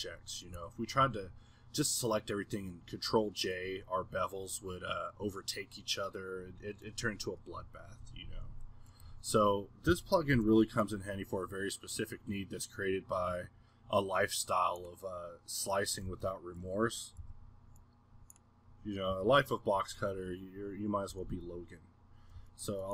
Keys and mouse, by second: 0.5 g, 1.5-7.6 middle drag, 8.0 z, 9.0 middle click, 9.1 a, 10.1 middle drag, 10.3 b, 16.3-17.2 middle drag, 17.2 b, 18.2-19.1 middle drag, 19.1 b, 20.1-21.8 middle drag, 22.2 middle click, 22.5-22.9 drag.